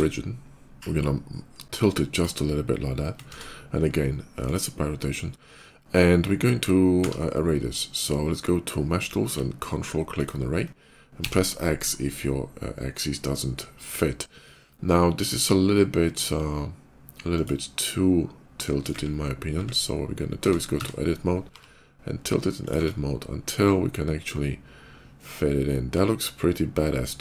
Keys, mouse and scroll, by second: 0.7 r, 1.8 click, 3.1 ctrl+a, 4.2 click, 6.0 ctrl+a, 6.9 q, 10.0 ctrl+click, 11.0 x, 12.7 middle click, 17.2 click, 17.6-18.7 middle drag, 20.2 Tab, 20.4 a, 20.6 Tab, 21.3 r, 22.4 click, 22.6 Tab, 23.4-27.2 middle drag.